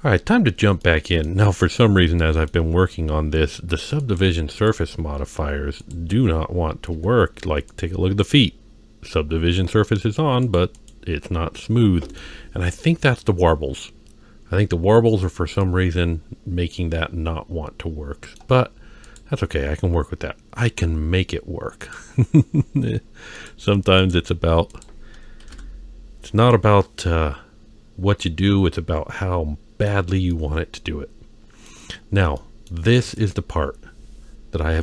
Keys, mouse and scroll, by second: 0.2-0.8 scroll up 2, 0.8-1.2 middle drag, 1.6-2.5 middle drag, 4.0 click, 4.5 click, 5.2 z, 7.0 z, 8.2 click, 10.4 click, 10.7 click, 11.6-12.2 middle drag, 15.6-18.4 middle drag, 18.6-19.0 scroll up 1, 19.0 click, 21.8 click, 23.3 drag, 24.0 click, 24.7 click, 27.0-29.8 middle drag, 30.3-31.7 middle drag, 31.9-32.4 scroll down 1, 32.4 middle click, 33.1 click.